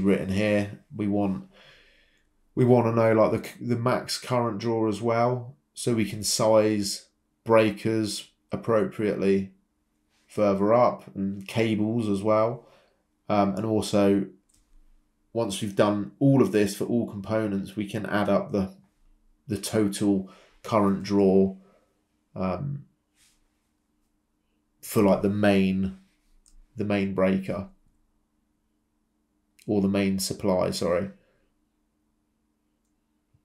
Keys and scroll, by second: 1.4 Escape, 9.8 BackSpace, 10.6 BackSpace, 14.8 Escape, 18.1 BackSpace, 18.9 BackSpace, 19.6 Return, 20.7 Escape, 21.8-23.3 typing, 25.2-26.0 typing, 29.2 Escape, 32.9 ctrl+c, 32.9 ctrl+v.